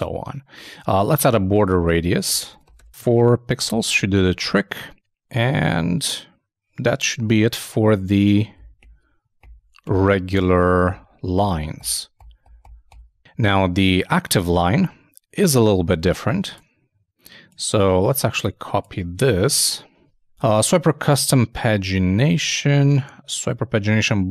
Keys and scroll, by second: 1.0 super+Tab, 5.1 super+Tab, 14.4 super+Tab, 19.5 alt+shift+Down.